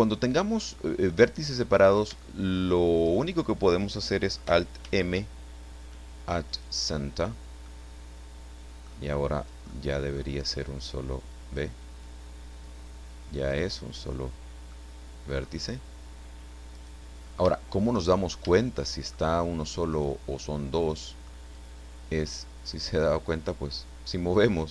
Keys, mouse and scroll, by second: 0.6-1.7 middle drag, 1.7-2.2 scroll up 1, 2.2 shift+middle click, 4.8 alt+m, 6.5 click, 7.9 middle click, 8.8 middle click, 9.3 click, 9.7 middle click, 10.9 click, 12.6 click, 14.8 middle click, 15.5 click, 15.7 scroll up 2, 16.7 right click, 17.2 scroll up 3, 17.5 shift+click, 18.1 shift+middle click, 18.1 shift+scroll up 2, 18.3 shift+middle click, 18.5 shift+right click, 19.9 right click, 21.5-22.9 drag.